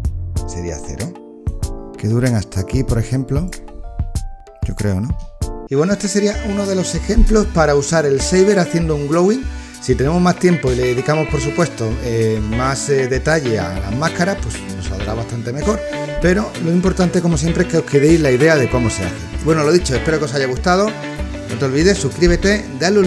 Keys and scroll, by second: 5.0 space.